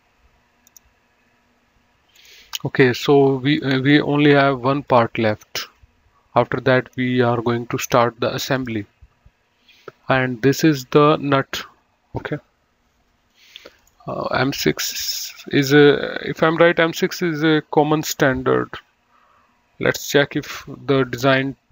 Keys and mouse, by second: 0.9 click, 2.5 click, 3.9 right click, 5.2 click, 8.8 click, 21.6 click.